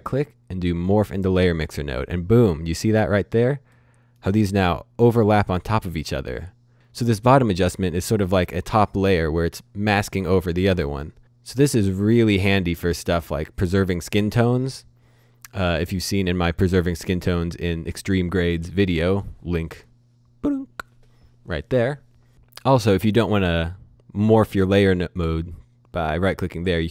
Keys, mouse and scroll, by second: 0.9 click, 2.5-3.7 scroll up 1, 3.7 middle click, 10.8-11.6 scroll down 1, 11.6 middle click, 15.1-15.6 scroll down 1, 15.6-16.1 scroll up 1, 16.1-16.5 scroll down 1, 16.5 middle click, 25.2 right click, 26.5 click.